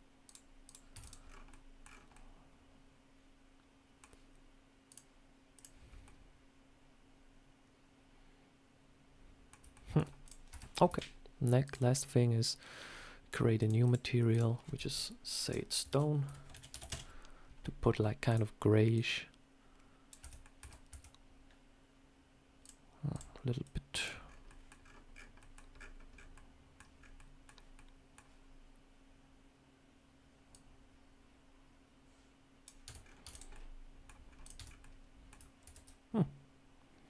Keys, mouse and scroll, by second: 0.5 click, 0.8 Tab, 0.9 click, 1.1 scroll down 4, 1.4 middle click, 1.7-2.2 scroll down 3, 2.0 middle click, 4.8 click, 5.7 scroll up 2, 5.9 middle click, 9.6 shift+middle click, 10.1 click, 10.4 Tab, 10.8 a, 11.5 click, 13.7 click, 14.2 click, 15.4 click, 18.1 click, 20.3 middle click, 20.8 Tab, 22.5 click, 23.0 click, 27.6 middle click, 30.4 click, 32.7 Tab, 32.9 scroll down 4, 33.1 Tab, 33.2 click, 33.4 middle click, 34.1-34.7 scroll up 3, 34.3 click, 34.4 Tab, 34.7 middle click, 35.5 ctrl+r.